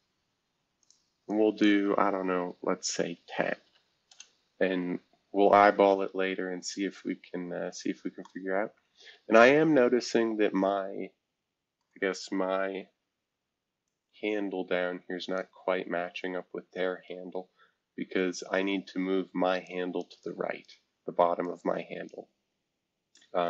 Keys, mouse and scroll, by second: 0.8 click, 1.3 click, 3.4-4.1 typing, 5.6 scroll down 2, 6.4 scroll up 1, 11.8-13.2 middle drag, 13.8-15.4 drag, 19.6 click, 20.2 click, 21.4 click.